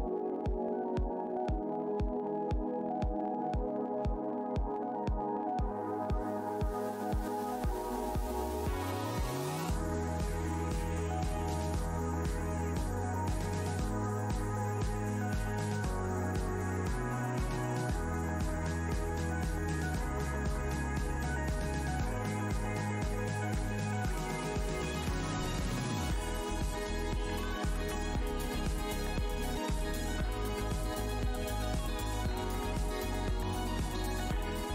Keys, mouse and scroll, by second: 0.7 alt+Tab, 0.8 alt+click, 1.0 alt+scroll up 1, 1.8 Tab, 1.9 click, 2.0 Tab, 2.4 right click, 3.0 click, 3.2 click, 3.3 Delete, 4.0 Tab, 4.4 Delete, 4.4 scroll down 1, 5.2-5.5 scroll up 1, 5.7 Tab, 6.0 click, 6.5 right click, 6.7 click, 6.8 Tab, 6.9 click, 7.0 Delete, 7.6 click, 7.7 Delete, 8.2 Tab, 8.4 click, 9.1 Tab, 9.4 Delete, 10.1 right click, 10.5 click, 11.9 Delete, 12.1-12.7 scroll down 1, 12.7 Tab, 13.1 alt+click, 14.0 alt+Tab, 14.1 alt+click, 14.6 Tab, 14.8 alt+click, 15.4 Tab, 15.5 shift+right click, 16.0 right click, 16.2 Tab, 16.4-18.3 typing, 16.6 scroll down 1, 18.5-18.9 scroll down 1, 19.2 scroll down 1, 19.7 Tab, 20.9 alt+Tab, 21.7 alt+Tab, 21.8 click, 22.3 w, 22.7 shift+Tab, 23.8 click, 24.2 shift+Tab, 25.4 ctrl+click, 25.8 shift+Tab, 28.2 shift+Tab, 28.3-28.7 shift+scroll down 2, 29.3 alt+Tab, 29.4 alt+scroll down 1, 29.6 alt+click, 30.2 Tab, 30.3 click, 30.6 Tab, 31.4 click, 31.6 alt+Tab, 32.7 Tab, 32.9 alt+click, 33.1 alt+scroll down 1, 33.8 alt+Tab.